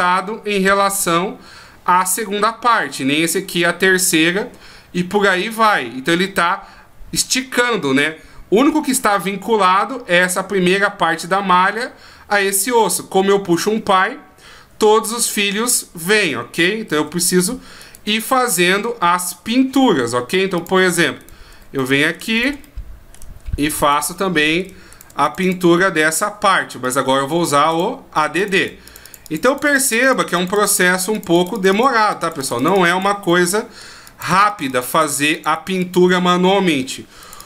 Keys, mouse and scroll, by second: 9.0-10.6 scroll up 4, 16.9 ctrl+z, 17.8 right click, 18.9-19.5 scroll down 2, 19.3 scroll up 1, 20.6 click, 21.2 right click, 21.8 middle click, 22.3 shift+right click, 22.6 middle click, 23.8 shift+right click, 24.1 middle click, 24.9 shift+right click, 25.2 click, 25.4 click, 26.8 click, 28.4 click, 28.6 click, 28.9 click, 29.0 click, 29.2 click, 29.4 click, 29.6 click, 29.8 click, 30.0 click, 30.2 click, 30.3 click, 30.5 click, 30.7 click, 31.1 click, 31.3 click, 31.5 click, 31.7 click, 32.0 click, 32.2 click, 32.4 click, 32.5 click, 32.8 click, 32.9 click, 33.3 middle click, 34.0 click, 34.3 click, 34.5 click, 34.7 click, 34.9 click, 35.1 click, 35.3 click, 35.5 click, 35.8 click, 36.3 middle click, 37.2 click, 37.4 click.